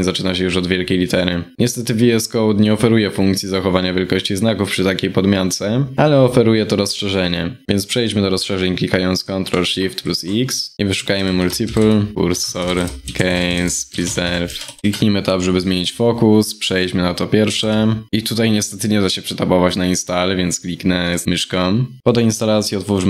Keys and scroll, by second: 9.6 ctrl+shift+x.